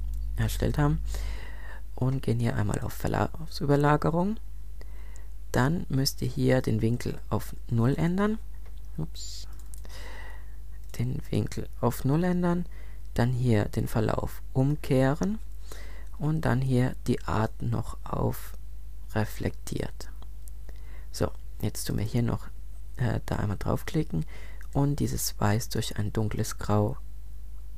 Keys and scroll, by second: 7.7 0, 7.9 Return.